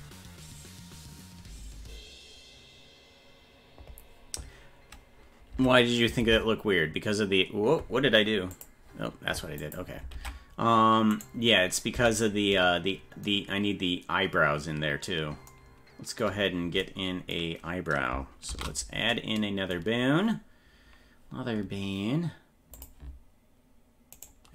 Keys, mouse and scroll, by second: 10.1 ctrl+Tab, 11.1 right click, 11.9 Tab, 18.5 shift+a, 22.7 click, 24.2 right click.